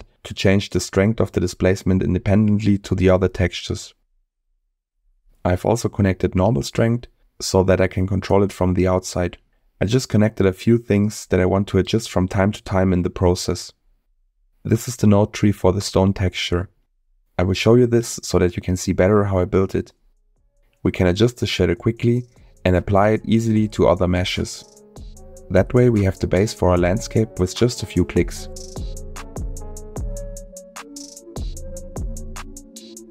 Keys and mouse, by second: 0.1 middle click, 4.7 middle click, 10.3 middle click, 12.0 middle click, 13.6 middle click, 15.1 middle click, 17.8-18.3 drag, 19.1 click, 21.3 middle click, 22.2 click, 29.0 middle click, 31.0-33.1 middle drag.